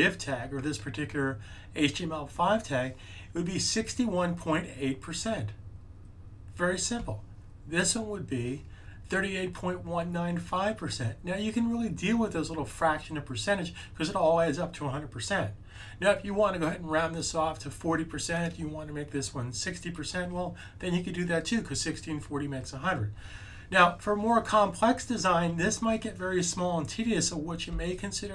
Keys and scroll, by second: 27.6 super+z.